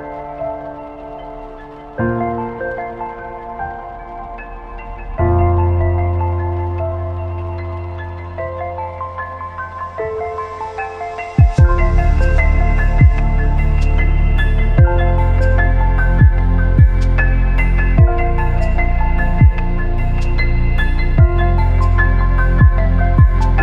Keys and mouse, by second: 0.6 shift+click, 4.3-5.4 drag, 6.6 ctrl+KP_1, 7.7 shift+click, 8.3 KP_Decimal, 9.4 shift+drag, 10.3-12.7 drag, 12.9 z, 14.1-16.4 drag, 16.5 z, 18.1 z, 19.5-21.9 drag, 22.0 z.